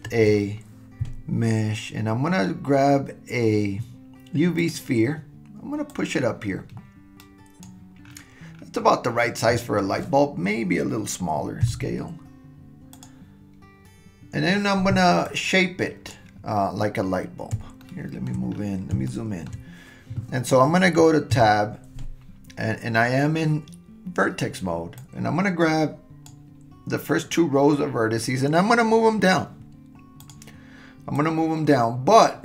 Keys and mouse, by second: 0.1 shift+a, 5.9-7.6 drag, 11.6 s, 15.3-16.1 drag, 17.8-18.3 shift+middle drag, 19.1-19.5 shift+middle drag, 21.4 Tab, 25.0-26.4 drag, 31.2-32.4 drag.